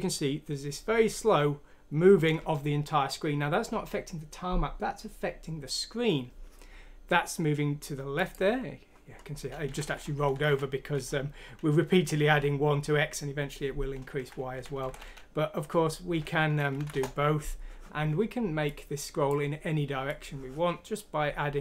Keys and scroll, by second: 9.7 Down, 9.8 Down, 10.0 Down, 10.1 Down, 10.3 Down, 10.5 Down, 14.2 Down, 14.5 Left, 14.8 Delete, 15.0 Up, 16.1 Delete, 16.7 F6, 16.9 Return.